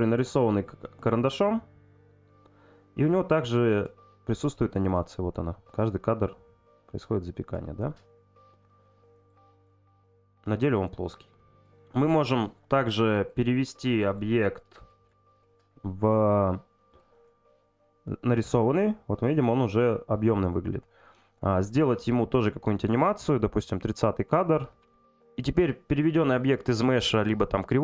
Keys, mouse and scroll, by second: 5.9 click, 11.6 click, 12.3 click, 15.3-17.0 right drag, 23.4 click.